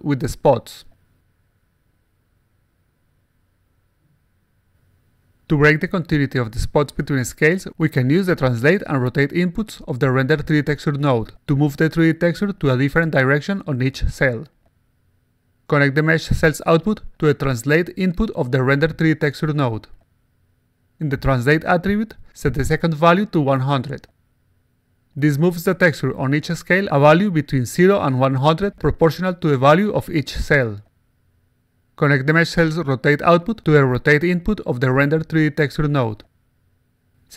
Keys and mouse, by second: 0.7-1.9 drag, 2.6 click, 3.9-4.9 alt+right drag, 5.1-5.7 alt+middle drag, 5.9 alt+click, 7.5 click, 8.9 click, 10.4-11.5 alt+drag, 16.4-17.6 drag, 18.2 click, 20.4 click, 22.6-23.8 typing, 26.5 1, 26.8 0, 29.6 1, 29.8 0, 32.9-34.3 drag, 36.8 click.